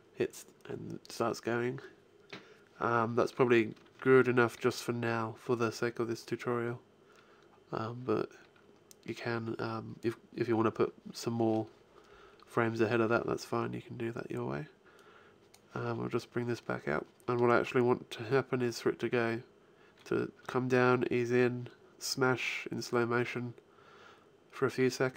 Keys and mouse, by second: 4.0 alt+a, 14.8-16.7 drag, 18.5-20.0 drag.